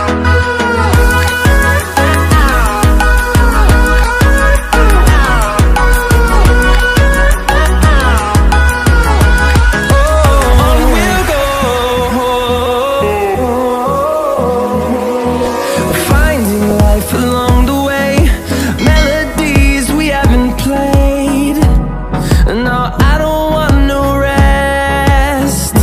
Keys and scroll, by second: 24.8 ctrl+shift+a.